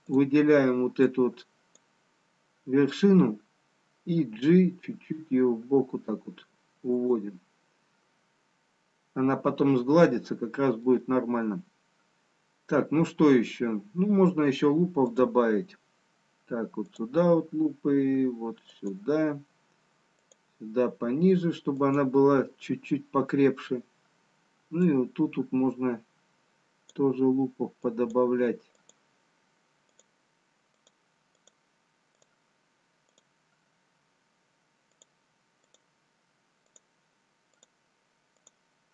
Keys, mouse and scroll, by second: 0.8 click, 1.2 click, 4.6 g, 15.3 click, 17.4 click, 25.1 click, 29.0-36.7 click.